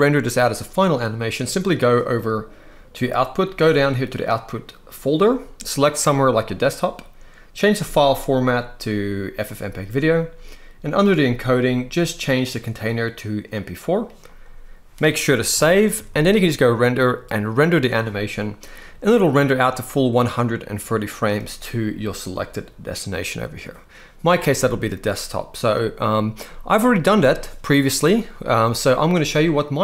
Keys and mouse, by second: 4.7 click, 7.5-9.2 drag, 10.7 click, 12.2-13.5 drag, 15.8 ctrl+s, 15.9 ctrl+s, 16.4-17.7 drag, 19.5-21.3 drag.